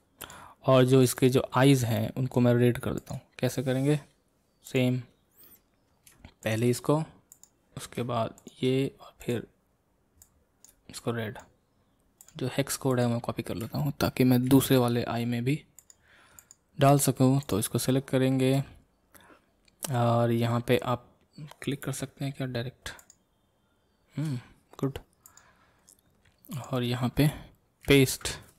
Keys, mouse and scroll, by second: 1.1 click, 1.5 scroll up 2, 2.0-3.1 middle drag, 3.1 click, 6.5-10.2 shift+drag, 17.5 click, 23.1-28.5 shift+drag.